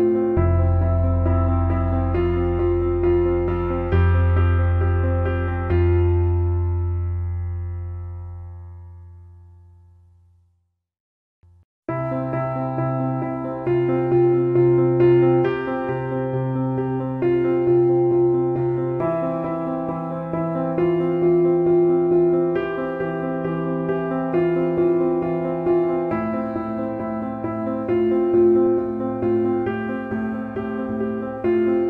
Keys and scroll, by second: 25.5 t.